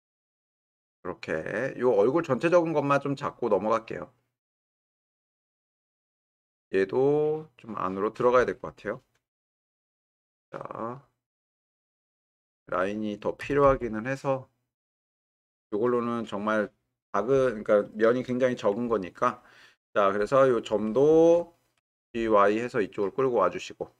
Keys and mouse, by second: 7.4 click, 9.4 g, 9.6 y, 12.4 click, 13.4 g, 13.6 y, 20.4 click, 21.8 g, 22.0 y.